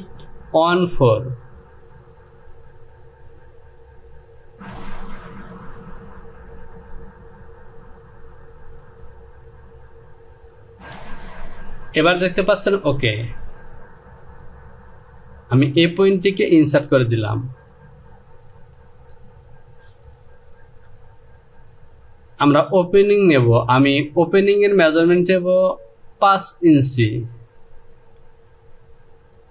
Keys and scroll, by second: 18.6 Home.